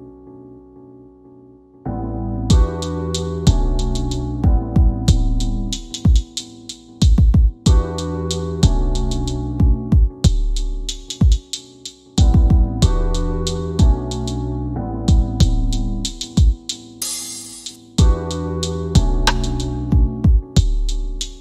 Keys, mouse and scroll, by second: 9.3 click, 21.1 scroll up 1.